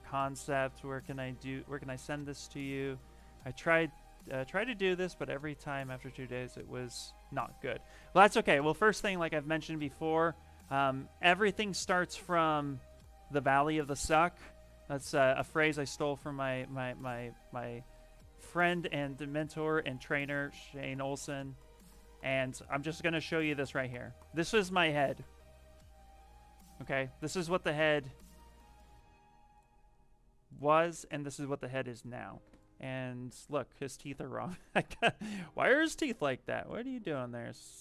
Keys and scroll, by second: 10.4 alt+Tab, 11.4 alt+Tab, 18.9 f, 22.4 s, 37.2 w.